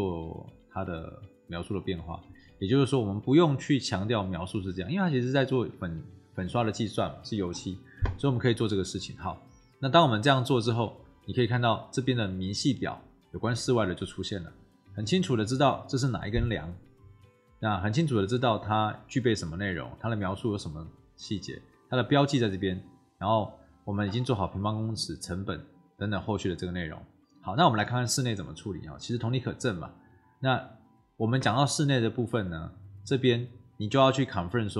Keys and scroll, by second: 4.4 BackSpace.